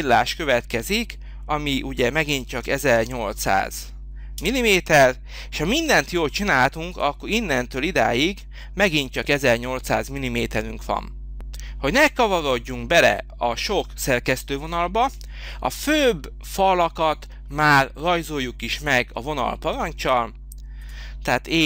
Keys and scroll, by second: 2.0-3.3 typing, 4.4 Return.